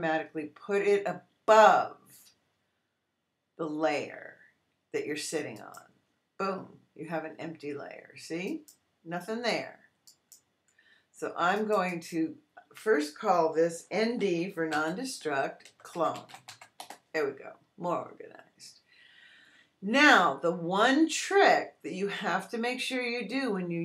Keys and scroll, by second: 14.1-16.9 typing.